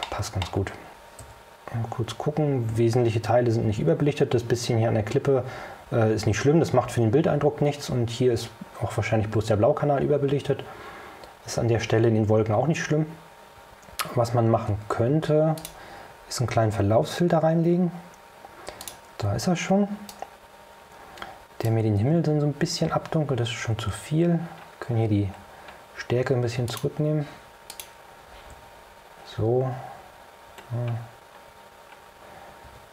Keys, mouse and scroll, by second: 0.1 middle click, 1.3 o, 4.0 o, 7.4 o, 9.9 o, 15.7 click, 18.9 click, 20.2-21.9 right drag, 23.2-23.7 scroll down 2, 25.6 scroll down 2, 26.8 click, 27.8 click, 28.6 o, 30.8 scroll up 2, 31.8 scroll up 2, 32.8 o.